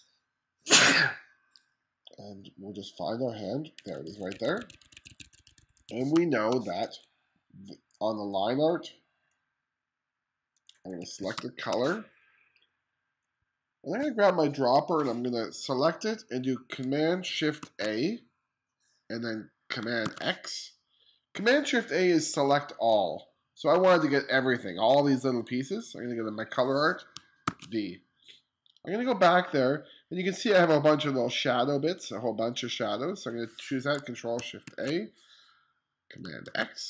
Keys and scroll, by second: 3.5 2, 5.7 space, 6.5 2, 10.8 2, 10.9 space, 17.2 shift+super+a, 19.6 super+x, 27.0 super+v, 34.2 shift+super+a, 36.0 super+x.